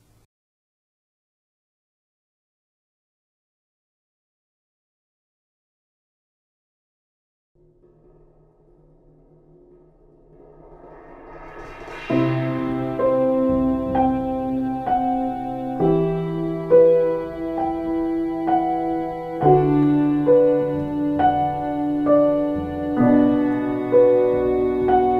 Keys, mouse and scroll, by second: 10.3 ctrl+z, 10.9 e, 18.2 b.